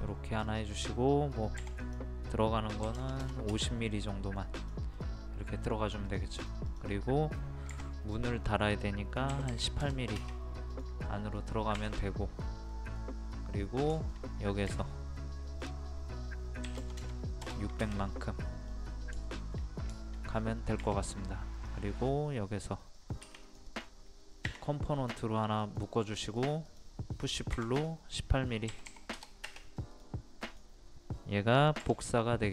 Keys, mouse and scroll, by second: 0.5 click, 1.6 p, 1.9 click, 2.9 KP_5, 4.0 middle click, 4.7 click, 5.0 middle click, 6.1 click, 7.7 p, 8.2 click, 9.3 KP_1, 10.8 click, 11.1 middle click, 11.8 Escape, 12.1 middle click, 15.5 click, 16.7 KP_6, 18.2 middle click, 18.7-19.1 scroll down 1, 19.3 shift+middle click, 20.0 shift+middle click, 20.4 scroll up 1, 20.9 r, 21.6-26.7 drag, 28.7 KP_1, 30.0 click, 30.9 scroll up 1, 31.9 typing.